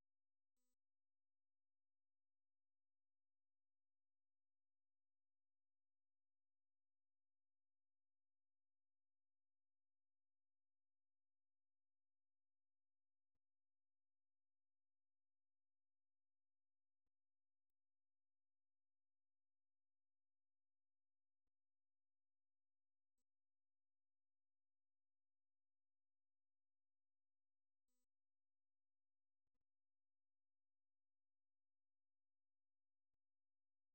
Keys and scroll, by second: 3.3 typing, 4.3-6.6 typing.